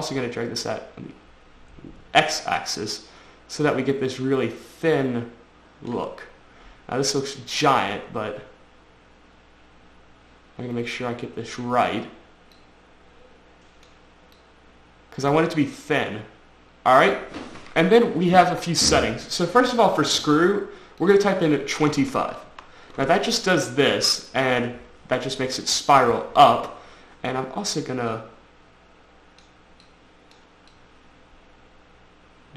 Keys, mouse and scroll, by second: 0.2 click, 3.9 click, 6.5-7.0 scroll down 3, 7.3 click, 12.8 click, 14.6 click, 21.2 click, 22.1 typing, 22.7 Return, 23.8-24.1 scroll up 3, 24.1-25.7 scroll down 4, 25.7-26.4 scroll up 3, 26.4-27.4 scroll up 1, 28.3 click, 30.1 click, 30.9 click.